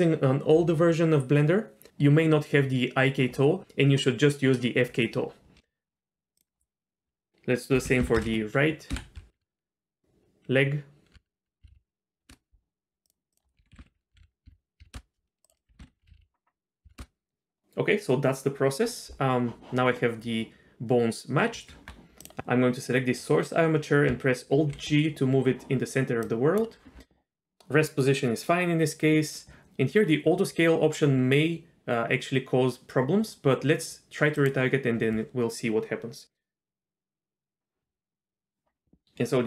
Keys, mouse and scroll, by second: 6.4-12.3 drag, 11.7 Down, 13.3-14.9 drag, 13.8 o, 14.2 Down, 15.4-17.0 drag, 16.1 Down, 16.2 Down, 21.7 Tab, 22.2 click, 24.5 alt+g, 26.3 click, 34.4 click, 39.0 middle click.